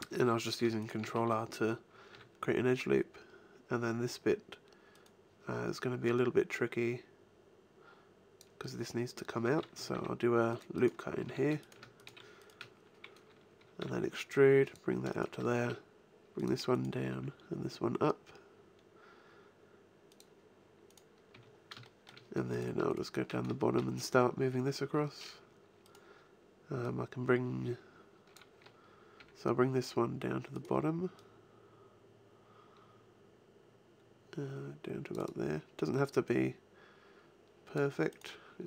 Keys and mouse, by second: 2.1 e, 6.1-7.3 drag, 7.9 middle click, 9.9 ctrl+r, 11.0-13.2 drag, 11.2 a, 13.8 e, 14.7 click, 15.4 g, 15.7-18.5 drag, 17.1 g, 20.2-21.3 drag, 20.8 right click, 21.3 a, 25.8-27.6 right drag, 26.8-28.7 drag, 29.2 g, 30.7 click, 35.2-37.7 drag, 38.1 click.